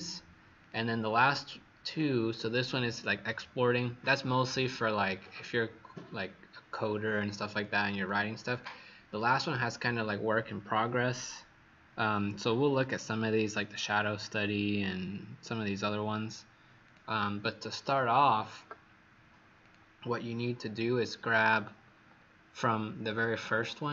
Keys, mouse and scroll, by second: 8.5 click, 16.8 click.